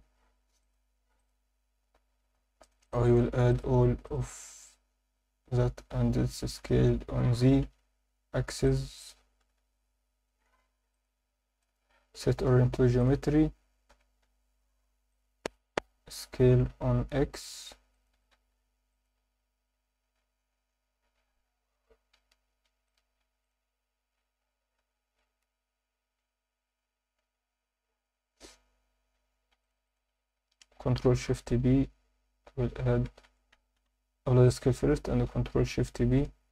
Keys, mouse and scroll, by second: 0.2 Tab, 0.6 click, 1.2 click, 2.6 click, 2.8 click, 3.5 click, 4.0 click, 6.6 s, 6.8 z, 7.6 Escape, 8.6-9.1 drag, 9.4 s, 9.6 z, 10.9 click, 11.6-13.9 right drag, 13.9 g, 14.3 z, 15.1-16.5 drag, 16.5 s, 17.0 x, 17.9 click, 18.1 s, 18.3 z, 18.9 click, 21.3 scroll up 1, 22.1 Tab, 22.6 1, 22.8 click, 23.4 shift+click, 29.6 shift+click, 29.8 shift+click, 31.0 ctrl+shift+b, 33.2 Escape, 33.5 Tab, 33.8 ctrl+a, 34.7 Tab, 35.7 ctrl+shift+b.